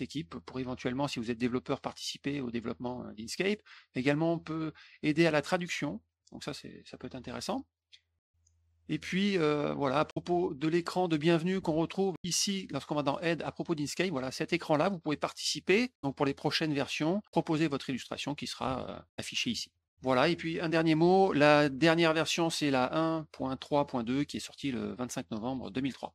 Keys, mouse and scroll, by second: 0.4 scroll down 1, 3.3 scroll down 2, 4.6 middle click, 4.6 scroll down 2, 5.5 scroll down 1, 7.3 click, 9.9 middle click, 11.0 click, 11.5 alt+Tab, 12.8 click, 14.5 click, 18.6 alt+Tab, 19.5 alt+Tab.